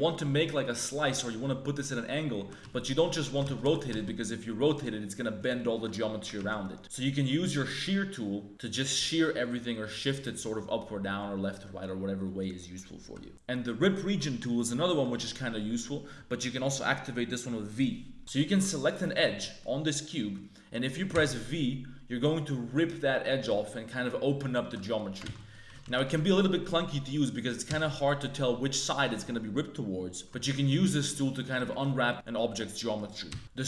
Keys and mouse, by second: 0.0 middle click, 1.1 middle click, 1.8 middle click, 2.4 r, 3.4 shift+s, 3.6 r, 5.5 click, 6.0 ctrl+click, 6.3 ctrl+z, 6.6 click, 8.5-10.1 drag, 10.5-12.7 drag, 18.2 1, 18.5 2, 19.0 right click, 19.6 click, 21.1 v, 23.6 middle click, 24.1 click, 25.2 ctrl+z, 25.3 click, 25.6 a, 25.8 shift+w, 26.0 2, 26.3 click, 26.6 click, 27.6 v, 30.2 ctrl+z, 30.2 a, 31.7 click, 32.9 click, 33.2 v.